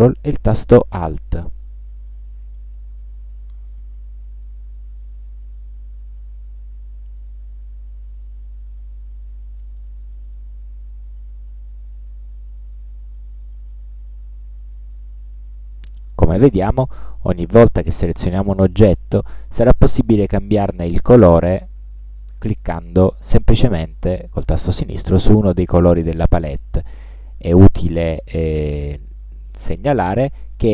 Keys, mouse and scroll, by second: 2.5-9.1 ctrl+alt+drag, 9.9 ctrl+alt+click, 11.0-11.4 ctrl+scroll down 2, 11.5-11.8 ctrl+scroll up 2, 13.6 click, 16.2 click, 16.2 scroll up 2, 16.9 click, 18.7 click, 21.1 click, 23.1 click, 27.3-27.6 ctrl+scroll up 2, 27.8-28.6 ctrl+scroll up 4, 29.7-30.0 scroll down 2, 30.4 scroll up 2.